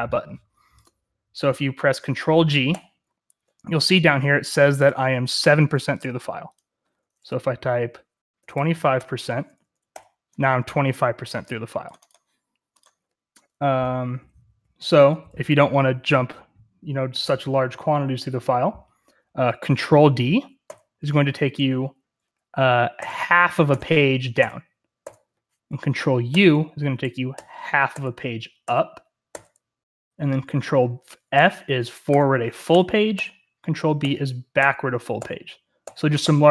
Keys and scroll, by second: 2.7 ctrl+g, 8.0-9.3 typing, 9.8 ctrl+g, 13.7-15.5 typing, 20.6 ctrl+d, 22.9 ctrl+d, 23.6-26.3 ctrl+d, 26.5 ctrl+u, 27.2 ctrl+u, 27.9 ctrl+u, 28.6 ctrl+u, 29.2 ctrl+u, 31.3 ctrl+f, 32.3 ctrl+f, 32.6 ctrl+f, 33.1 ctrl+f, 33.9 ctrl+b, 34.5 ctrl+b, 35.1 ctrl+b, 35.8 ctrl+b, 36.2 ctrl+b.